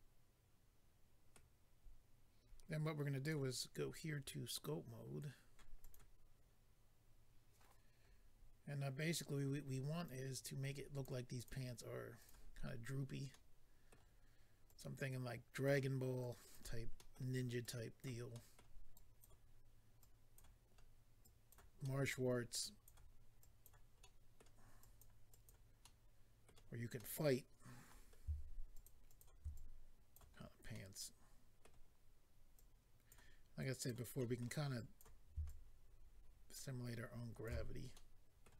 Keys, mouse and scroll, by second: 3.2 click, 3.3 click, 5.8 click, 5.9 click, 10.0 click, 11.3 click, 11.4 click, 12.2 click, 12.5 click, 12.7-13.3 scroll up 1, 13.3 middle click, 14.7 click, 16.2 click, 16.9 middle click, 17.1 middle click, 17.6 click, 18.3 middle click, 18.9 click, 20.3 click, 20.6 scroll down 1, 21.2 click, 21.8 middle click, 22.6 click, 23.4 click, 24.0 middle click, 24.8 click, 25.3 click, 25.4 click, 25.8 middle click, 27.9-28.5 scroll up 2, 28.7 shift+click, 28.8 shift+click, 29.1 shift+click, 29.2 shift+double click, 29.5 click, 30.3-30.7 scroll down 2, 30.7 middle click, 31.9-32.6 scroll up 2, 32.6 click, 33.6 click, 34.2 middle click, 34.8 click, 35.4 shift+click, 37.6-37.9 scroll down 2, 37.9 middle click.